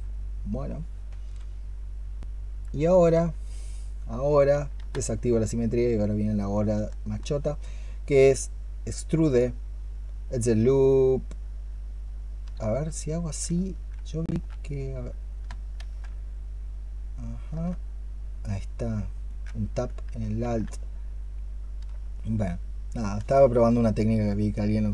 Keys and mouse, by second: 2.7 alt+click, 6.5-12.3 space, 15.6 ctrl+z, 20.2 ctrl+z, 21.7 ctrl+z, 22.2-24.9 space.